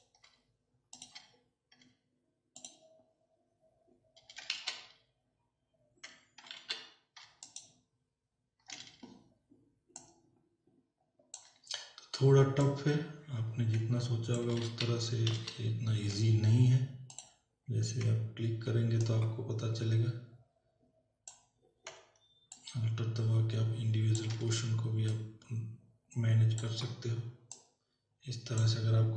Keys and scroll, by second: 4.8 z, 6.6 ctrl+alt+z, 14.8 ctrl+alt+z.